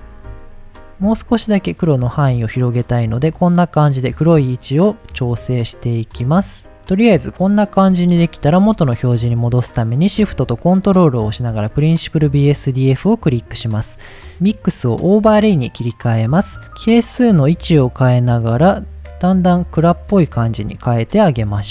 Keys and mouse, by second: 1.2-3.7 drag, 5.4-6.3 middle drag, 8.2-8.5 middle drag, 12.2 middle click, 13.8 click, 14.7-16.5 drag, 16.9-21.0 drag, 21.4 middle drag.